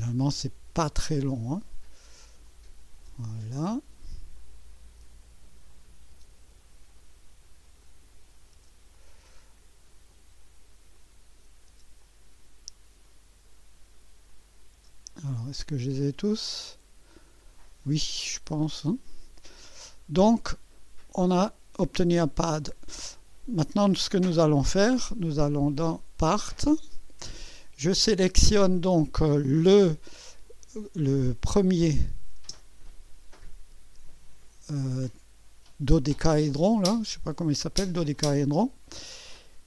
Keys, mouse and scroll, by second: 0.4 Return, 1.3 click, 2.5 click, 3.0 Return, 3.4 click, 4.4 click, 5.7 click, 6.1 Return, 6.9 click, 7.8 click, 8.5 Return, 8.9-9.6 drag, 10.1 click, 11.0 click, 11.7 Return, 12.0 click, 13.0 click, 14.2 click, 14.7-15.5 typing, 15.2-19.0 drag, 20.5-21.2 drag, 23.0-23.4 scroll up 1, 25.5 click, 26.6 click, 31.7 click, 32.4 space, 37.7 click, 38.5 click.